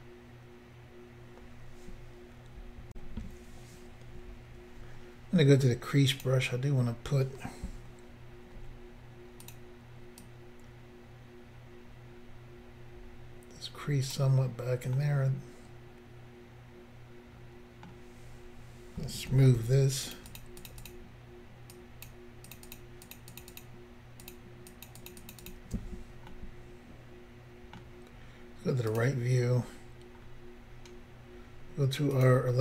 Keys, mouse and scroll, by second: 2.9 Insert, 6.2 click, 8.6 f, 9.5 click, 10.2 click, 15.0 middle click, 18.0-19.1 scroll up 2, 20.1 shift+click, 20.2 shift+click, 20.3 shift+click, 20.4 shift+double click, 20.6 shift+click, 20.7 shift+click, 20.8 shift+click, 20.9 shift+double click, 21.7 shift+click, 22.5 shift+click, 22.6 shift+click, 22.7 shift+click, 22.8 shift+double click, 23.1 shift+click, 23.2 shift+click, 23.3 shift+click, 23.4 shift+double click, 23.5 shift+click, 23.6 shift+click, 24.2 shift+click, 24.3 shift+click, 24.7 shift+click, 24.9 shift+click, 25.0 shift+click, 25.1 shift+double click, 25.2 shift+click, 25.3 shift+click, 25.4 shift+click, 25.5 shift+double click, 26.3 middle click, 28.9 click, 29.6 scroll up 2, 30.2 scroll up 2, 32.2 click.